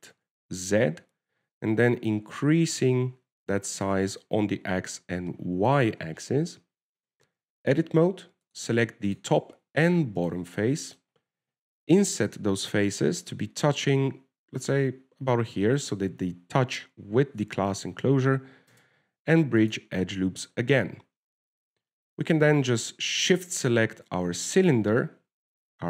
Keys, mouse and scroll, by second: 8.4 Tab, 9.7 click, 10.4 right click, 10.7 middle click, 11.5 shift+right click, 11.8 middle click, 12.5-13.3 scroll up 5, 13.3 i, 20.0 space, 21.8 Tab, 22.8 scroll down 3, 24.7 shift+right click.